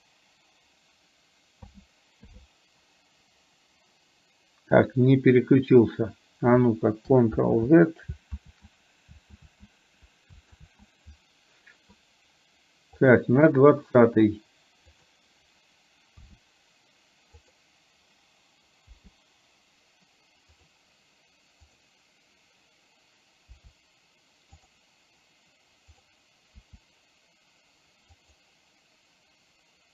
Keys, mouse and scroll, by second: 1.7 a, 2.3 i, 7.6 ctrl+z, 8.3 ctrl+click, 13.1 click, 15.1 click, 16.3 r, 18.9 i, 20.7 click, 21.8 click, 23.6 r, 26.7 r.